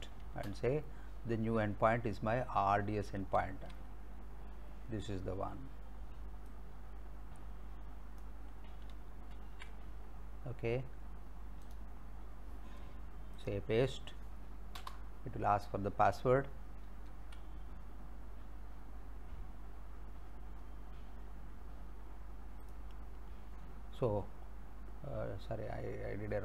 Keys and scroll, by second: 0.4 space, 1.6 alt+Tab, 3.0 alt+Tab, 9.3 ctrl+c, 14.8 Return, 17.1 alt+Tab.